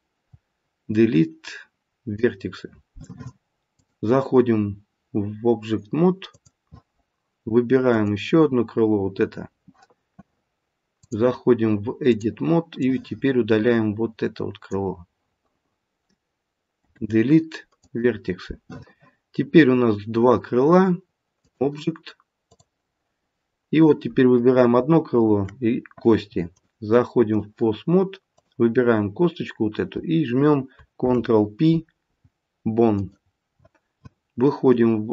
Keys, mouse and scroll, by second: 3.7 click, 7.9 click, 12.2 click, 12.7 click, 16.8 Delete, 19.6 click, 22.6 click, 25.1 shift+click, 26.4 click, 30.9 ctrl+p, 34.6 click.